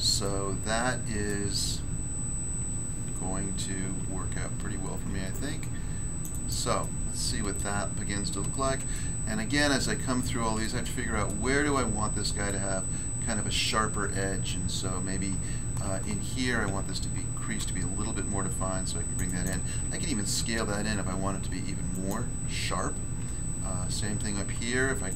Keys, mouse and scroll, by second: 0.2 middle click, 1.2 middle click, 4.0 ctrl+r, 5.3 click, 6.2 click, 6.3 click, 6.5 click, 6.8 middle click, 7.5 middle click, 7.8 scroll down 1, 8.9 shift+middle click, 9.9 scroll up 1, 10.6 shift+middle click, 11.6 scroll up 1, 12.4 middle click, 13.6 middle click, 16.6 ctrl+r, 17.5 click, 19.1 click, 19.2 click, 19.4 click, 20.2 s, 21.9 click, 24.2 ctrl+r, 25.0 click.